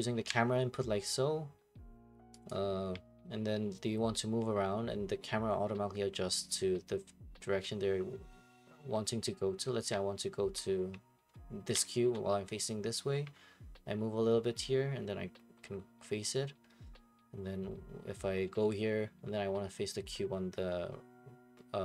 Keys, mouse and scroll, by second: 0.5 click, 2.5-4.6 drag.